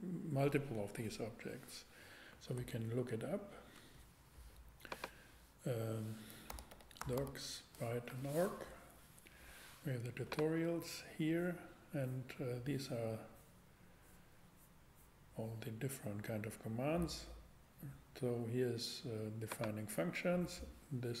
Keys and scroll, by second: 2.6 super+Tab, 6.5 d, 6.7 o, 7.0 c, 7.2 s, 8.1 Return.